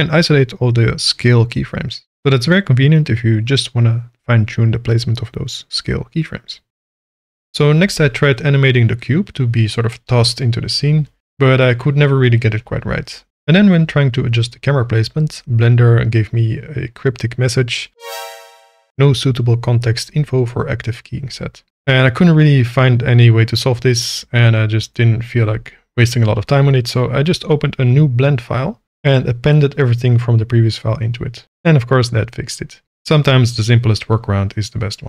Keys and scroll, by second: 1.4 g, 1.5 x, 3.5 g, 4.4 space, 5.1 g, 5.5 space, 5.9 shift+Left, 7.8 space, 16.4 k, 30.0 a, 31.5 x.